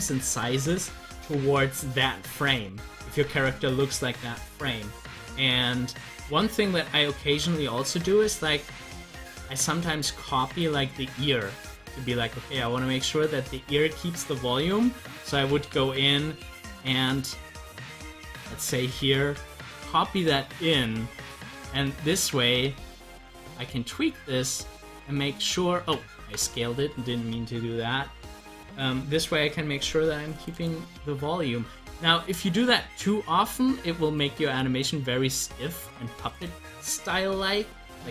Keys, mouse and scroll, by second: 1.0 scroll up 1, 2.3 scroll down 1, 7.6 click, 8.4 scroll up 1, 14.6 click, 30.3 click, 32.0-36.8 drag.